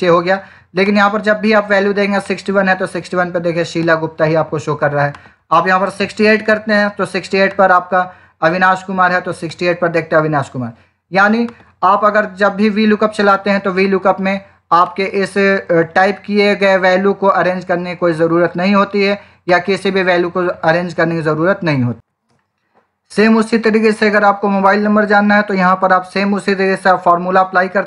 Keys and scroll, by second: 5.6-6.6 typing, 22.0 ctrl+shift+r.